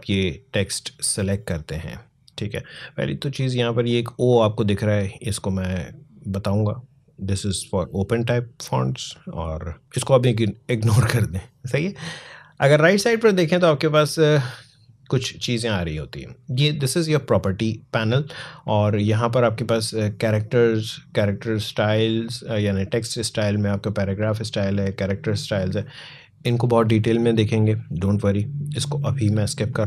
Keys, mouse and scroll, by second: 18.7 click, 24.5 click.